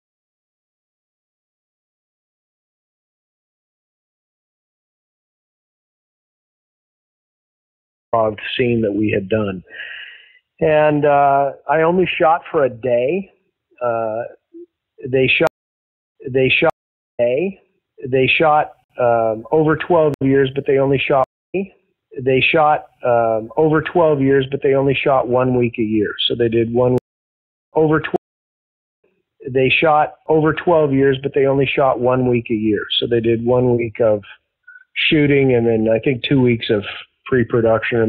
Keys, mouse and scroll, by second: 0.3 click, 1.3 ctrl+z, 1.6 click, 2.0 click, 2.4 click, 3.9 click, 5.5 ctrl+z, 6.2 click, 6.9 click, 8.0 click, 8.0 space, 11.1 ctrl+s, 11.9-13.0 drag, 13.3 click, 14.5 click, 15.4 space, 15.9 ctrl+shift+Delete, 16.1 space, 16.6 space, 17.0 click, 17.1 space, 18.7 ctrl+x, 20.0 ctrl+z, 21.1 space, 21.3 click, 21.4 space, 22.4 click, 23.2 click, 25.1-26.9 drag, 26.9 space, 27.4 ctrl+shift+Delete, 27.6 space, 28.0 space, 28.4 click, 28.8 click, 28.9 space, 31.2 ctrl+s, 35.8-37.4 drag, 37.8 click.